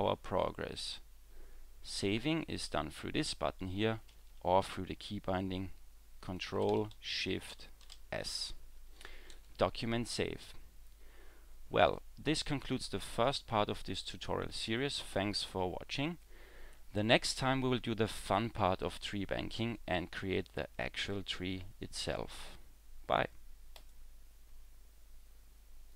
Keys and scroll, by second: 7.5 ctrl+shift+s.